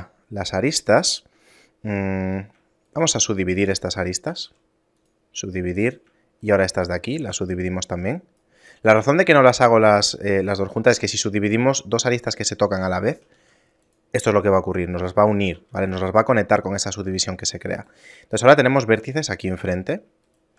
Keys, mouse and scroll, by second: 1.8 middle click, 2.0 scroll down 2, 3.0 shift+right click, 3.0 scroll down 1, 4.5 w, 5.9 right click, 6.5 right click, 6.8 shift+right click, 7.3 w, 9.2 right click, 10.0 shift+right click, 10.7 right click, 12.6 right click, 13.0 shift+right click, 13.4 w, 15.8 ctrl+z, 17.1 ctrl+Tab, 17.8 right click, 18.6 shift+right click, 19.7 right click, 20.3 shift+right click.